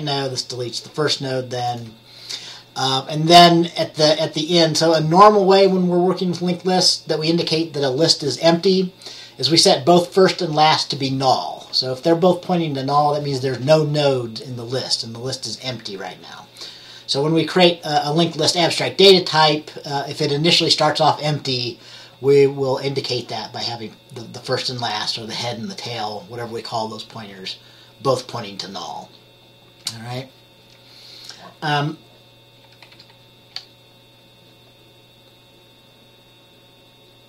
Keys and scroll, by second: 33.0 F10.